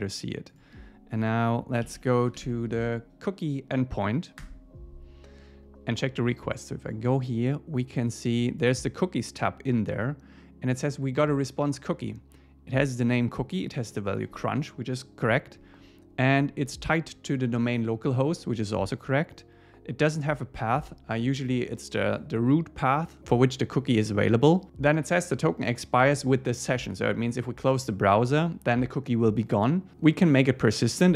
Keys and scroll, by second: 4.4 Return.